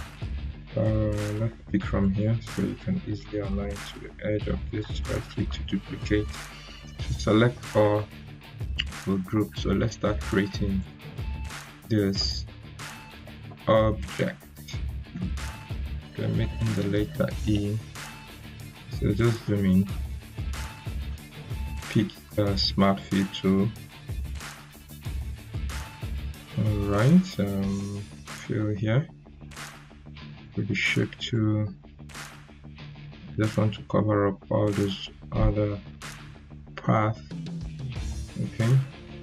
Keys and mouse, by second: 0.2 ctrl+z, 1.9-5.0 drag, 4.7 right click, 5.4 click, 6.6 ctrl+a, 7.7 ctrl+g, 8.9 click, 9.3 right click, 10.7 click, 13.0 p, 15.0-15.6 drag, 16.3 ctrl+z, 17.3 p, 18.6-19.8 drag, 28.2-31.5 drag.